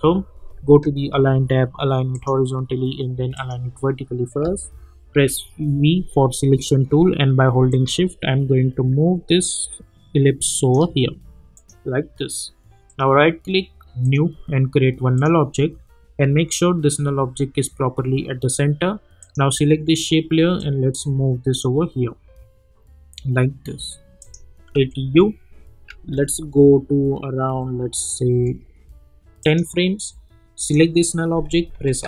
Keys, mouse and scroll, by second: 2.1 click, 5.1 v, 7.7 click, 12.9 right click, 14.0 click, 19.2-24.0 drag, 24.2 click, 24.7 u, 25.9 =, 27.5 -, 28.3 =, 29.4 click, 31.7 r.